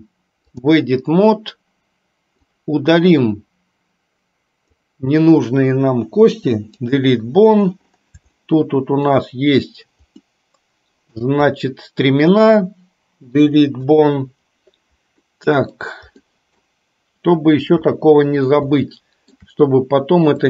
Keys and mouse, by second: 2.5-4.9 drag, 6.4 Delete, 8.5 shift+middle click, 10.3-11.3 middle drag, 11.5 click, 13.4 Delete, 15.3 middle click, 16.3 middle click, 17.9 KP_3, 19.0 shift+middle click.